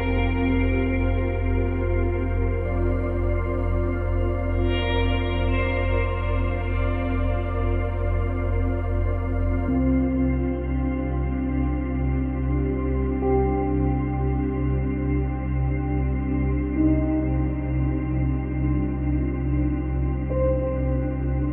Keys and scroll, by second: 5.8 space, 7.0 space, 9.6 space, 10.7 space, 18.6 space, 19.7 space.